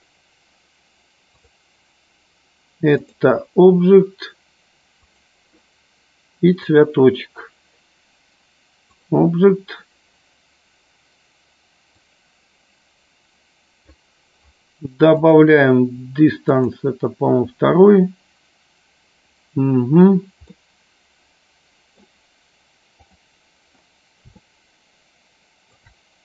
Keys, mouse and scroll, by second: 1.3-3.5 drag, 5.0 click, 9.0 click, 12.0-13.9 drag, 15.3-16.9 drag, 20.8-22.1 middle drag, 24.7-26.0 shift+middle drag.